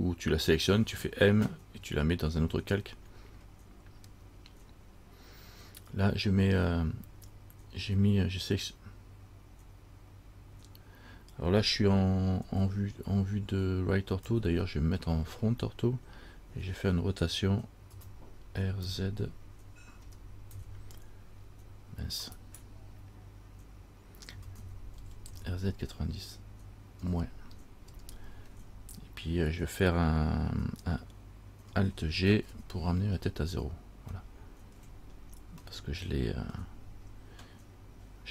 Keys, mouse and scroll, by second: 12.6 KP_3, 14.4 KP_1, 18.1 r, 24.6 r, 32.5 alt+g, 33.4-34.3 scroll down 3, 34.4 shift+middle click, 35.4-35.8 scroll down 1, 35.9 shift+middle click.